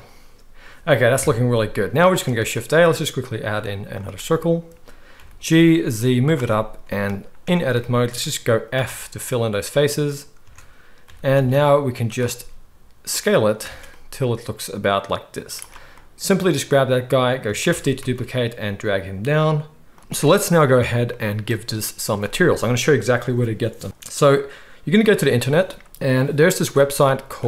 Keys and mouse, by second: 1.2 KP_1, 2.2 shift+a, 4.3-13.7 right drag, 5.2 g, 5.2 click, 7.4 Tab, 8.7 f, 10.4 Tab, 11.0 g, 12.4 s, 13.6 alt+a, 13.7-15.4 middle drag, 15.4-27.4 right drag, 17.7 shift+d, 20.0 alt+a.